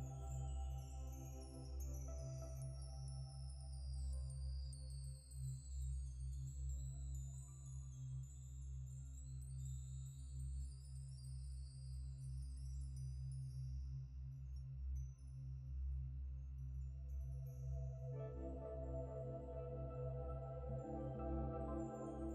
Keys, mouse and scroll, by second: 5.5 ctrl+shift+s, 7.7 alt+Tab, 8.0 alt+Tab, 8.0 alt+Tab, 9.2 double click, 9.9 ctrl+s, 12.2 Escape, 12.4 Escape, 17.1 double click, 17.5 scroll down 1, 17.8 middle click.